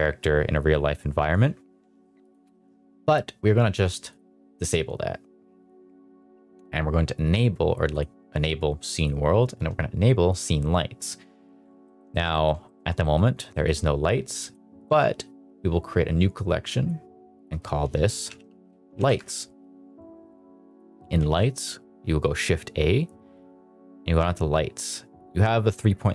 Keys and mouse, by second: 2.1-11.0 drag, 11.7 middle drag, 12.0 shift+middle drag, 12.2 middle click, 12.5 shift+middle click, 12.9 middle click, 13.4 middle drag, 14.3 click, 14.7 click, 16.7 drag, 17.2 click, 17.4-19.1 drag, 20.6 click, 21.1 shift+a.